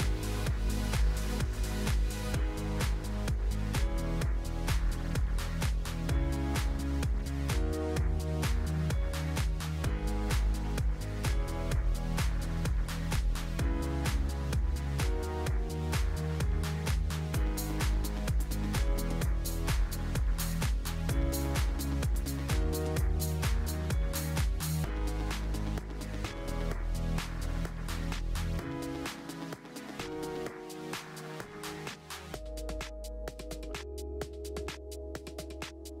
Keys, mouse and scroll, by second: 6.5 click, 7.6 click, 8.2 click, 9.4 alt+h, 9.7 click, 10.1 click, 11.8 click, 12.2 click, 13.7 shift+d, 15.7 g, 17.9-18.3 scroll down 1, 18.3-19.4 drag, 19.4 shift+d, 22.6 shift+d, 24.6 g, 26.5 click, 27.5 click, 28.1 shift+a, 29.0-29.3 scroll up 4, 29.3-29.8 scroll down 1, 29.8 s, 31.7 g, 35.8-36.0 drag.